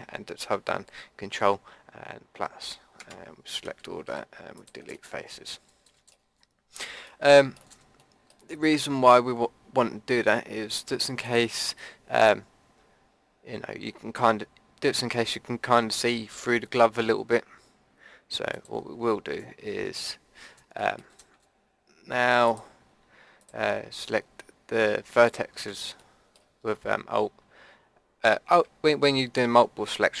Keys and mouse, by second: 1.5 ctrl+KP_Add, 4.0 Delete, 9.9-11.2 middle drag, 11.2 click, 11.8 middle click, 12.4 click, 13.7-17.9 middle drag, 18.5-20.5 drag, 20.5 middle click, 22.4-25.0 middle drag, 25.0-26.0 drag, 26.0-30.2 middle drag.